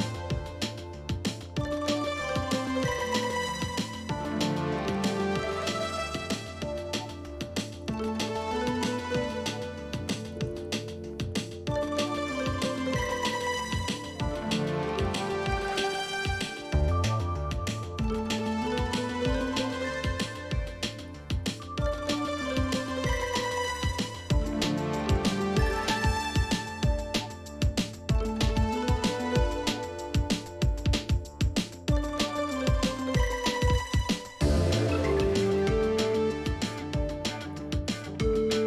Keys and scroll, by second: 2.9 Left, 2.9 Left, 3.0-3.8 typing, 5.2 Down, 6.0 shift+Down, 7.0 Down, 7.2 Down, 7.4 Left, 7.6 Left, 7.7 Left, 7.7 Up, 7.8 Up, 7.8 Up, 10.3 Left, 10.3 Left, 10.5 Left, 10.6 1, 12.9 shift+Down, 14.2 shift+Left, 14.4 shift+Left, 14.7 shift+Right, 14.9 shift+Left, 15.9 Left, 17.2 Right, 17.3-17.7 Right, 18.0 Right, 18.0 Down, 18.1 Down, 18.3 Down, 18.7 Up, 20.0 shift+Left, 20.9 Left, 20.9 Up, 21.0 Left, 21.1 Left, 21.3 Up, 21.8 Left, 21.8 Left, 21.9 Left, 22.0 Left, 22.1 Left, 34.5-35.6 typing, 36.8-37.5 Up, 37.5 Down, 37.9 Down, 37.9-38.6 Right.